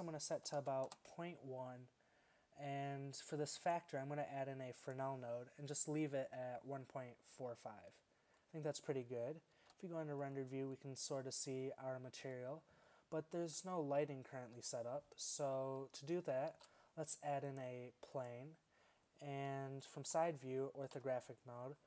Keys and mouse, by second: 1.2 middle click, 8.6-9.6 middle drag, 9.6 shift+z, 13.9-16.5 middle drag, 14.6 z, 16.5 shift+a, 20.1 KP_3, 21.0 KP_5.